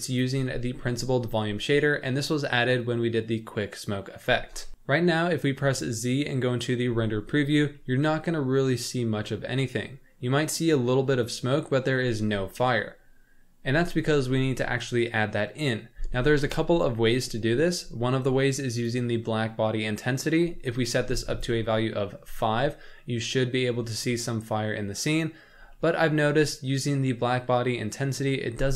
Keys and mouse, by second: 0.9 middle click, 4.7 z, 5.6 z, 7.9-10.3 middle drag, 11.3-11.9 middle drag, 14.4 middle click, 18.8-21.4 right drag, 23.0-23.6 middle drag, 23.9 shift+middle drag, 25.8 middle click.